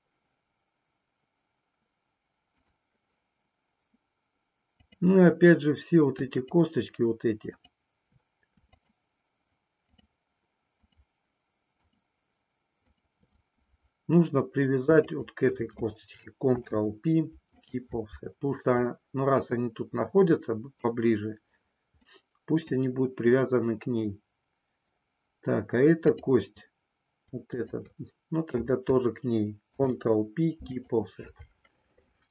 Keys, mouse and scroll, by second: 5.0 click, 7.5 shift+click, 8.7 shift+click, 9.8 shift+click, 10.7 shift+click, 11.7 shift+click, 12.8 shift+click, 16.5 ctrl+p, 18.8-21.0 middle drag, 22.1 middle click, 27.6 shift+click, 29.6 ctrl+p.